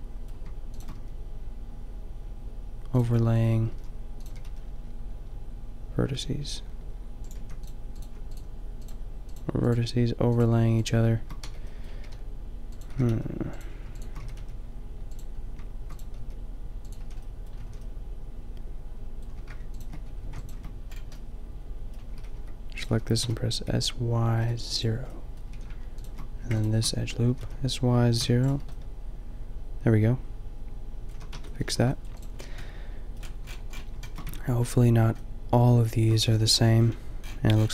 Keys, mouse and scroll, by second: 1.0 g, 3.6 shift+g, 4.3 g, 7.3 a, 11.5 b, 12.0 g, 12.9 g, 14.1 g, 16.2 g, 17.0 a, 17.4-18.8 drag, 17.6 a, 19.6 a, 20.2 a, 21.4 alt+shift+middle click, 22.1 s, 22.8 s, 25.5 a, 26.3 a, 27.3 s, 30.5 middle click, 31.1 a, 31.3 Tab, 31.6 a, 34.3 Tab.